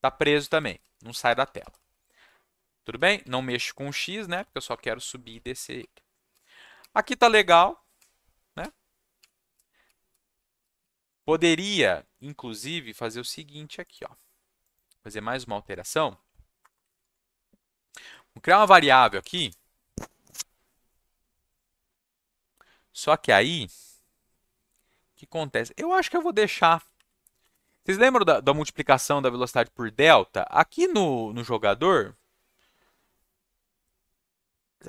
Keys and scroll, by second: 0.0-11.3 typing, 16.6 Return, 16.7 Return, 16.8 Up, 17.0 Tab, 18.8-19.8 typing, 26.6 shift+Up, 27.4 BackSpace.